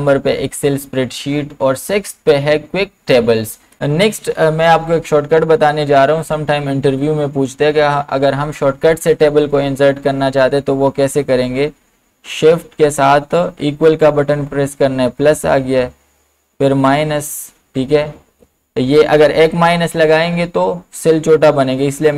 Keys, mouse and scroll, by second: 12.5 BackSpace, 14.3 typing, 16.3-17.1 typing, 20.1 typing.